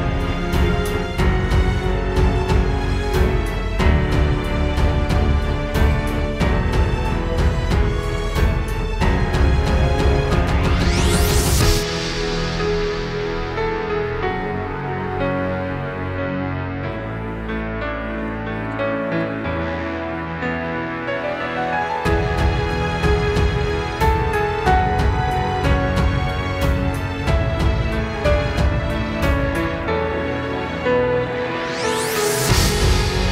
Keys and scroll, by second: 3.5 super+], 3.8 super+[, 4.9 space, 7.2 space, 23.6 space, 26.0 space, 26.6 space, 27.8 super+[, 28.9 space, 29.4 alt+super+space.